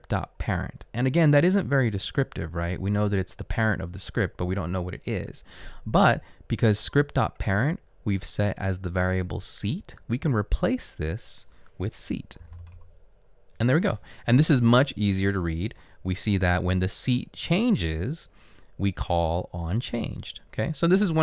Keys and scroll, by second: 12.3-13.3 typing.